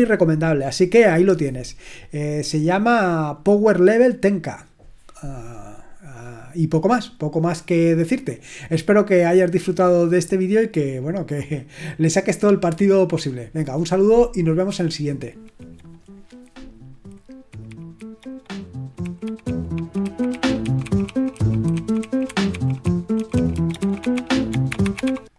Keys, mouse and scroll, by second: 2.9-4.3 scroll up 1, 4.3-14.8 scroll up 1, 14.8 click.